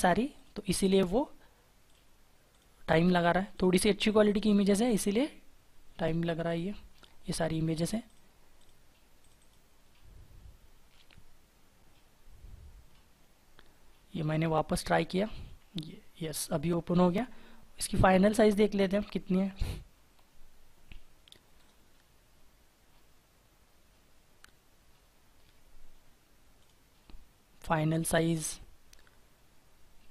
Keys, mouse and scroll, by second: 0.3 double click, 9.5 double click, 20.8 right click.